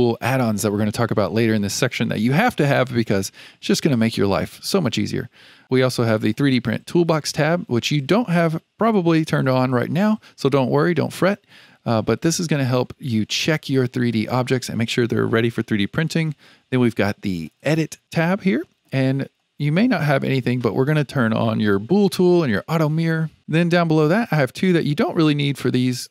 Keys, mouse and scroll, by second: 6.1 click, 17.4 click.